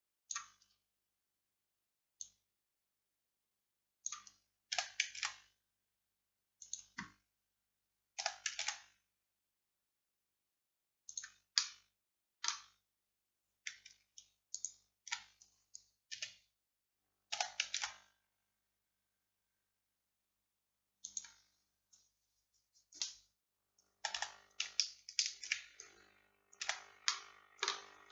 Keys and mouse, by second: 2.3-4.1 drag, 4.8 s, 8.3 s, 11.6-13.3 drag, 16.2 KP_1, 17.4 s, 24.0 a, 24.2 a, 26.7 middle click, 26.7 a, 27.1-28.1 drag.